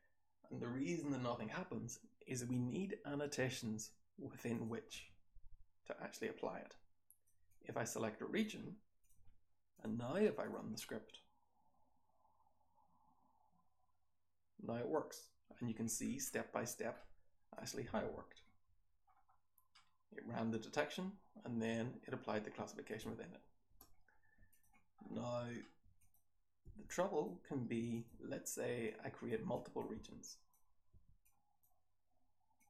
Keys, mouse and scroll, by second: 4.5 click, 6.2-7.2 drag, 7.4-8.3 drag, 16.1-17.5 scroll up 2, 17.5 click, 17.5-18.6 scroll up 1, 17.9 h, 18.6-19.1 scroll up 1, 18.6 h, 19.1-19.6 scroll down 1, 19.6 scroll down 1, 19.7-22.8 scroll up 1, 22.8 click, 22.8-23.7 scroll up 1, 23.7 scroll up 1, 23.7 BackSpace, 24.9-25.6 scroll down 1, 25.6-26.6 scroll up 1, 25.9 click, 26.6-27.9 scroll up 1, 26.6 r, 26.8-27.2 drag, 27.9 click, 27.9-28.8 scroll up 1, 28.8-29.2 drag, 28.8-32.5 scroll up 1, 29.3 r, 29.5 drag, 29.9 r, 30.2 click, 30.9 r, 31.2 click, 32.5-32.6 drag, 32.5-32.6 scroll up 1.